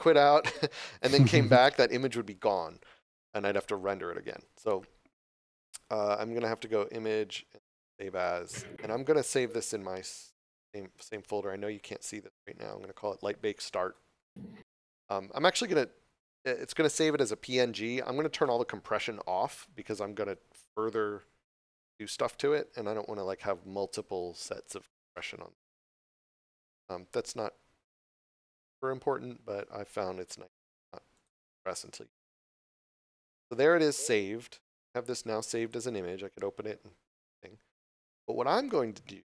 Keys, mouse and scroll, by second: 5.3 click, 8.1 click, 12.3 click, 15.7 click, 25.7 click, 31.1 click, 34.8 click.